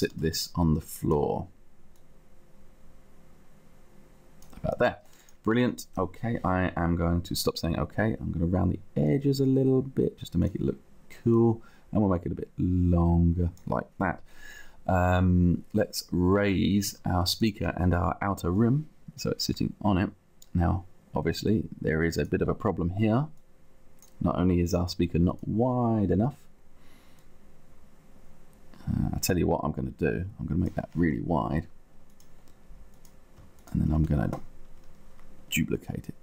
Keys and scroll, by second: 0.0 space.